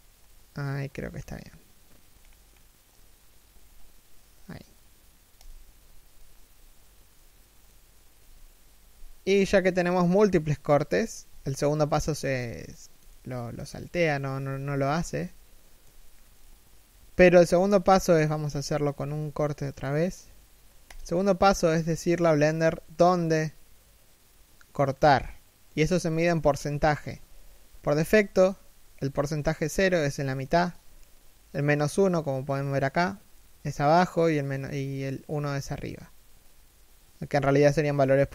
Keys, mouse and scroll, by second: 6.7 middle click, 7.7 KP_1, 10.9 a, 12.7 shift+middle click, 14.0 KP_3, 14.4 KP_1, 15.0 shift+middle click, 17.0-18.1 scroll up 1, 18.1 k.